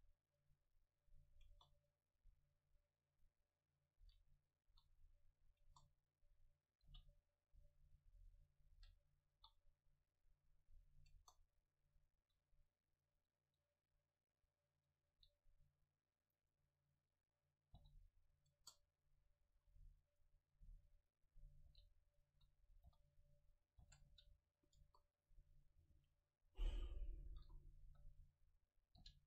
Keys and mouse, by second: 0.6 middle click, 1.5 KP_0, 4.1 shift+d, 4.5-7.6 drag, 4.7 s, 5.7 KP_0, 6.9 g, 7.9-9.8 drag, 8.8 shift+d, 9.4 s, 10.3-12.2 drag, 11.2 KP_0, 12.2 shift+d, 13.5 middle click, 15.2 s, 16.4-18.2 drag, 17.8 g, 18.6-22.0 drag, 18.6 KP_0, 19.5 shift+d, 20.8 KP_7, 21.8 g, 22.2-24.7 drag, 22.4 s, 22.9 h, 24.0 ctrl+z, 24.1 g, 24.8 KP_0, 25.0 click, 26.0 shift+d, 26.5 click, 27.4-29.0 drag, 27.8 KP_7, 29.0 g.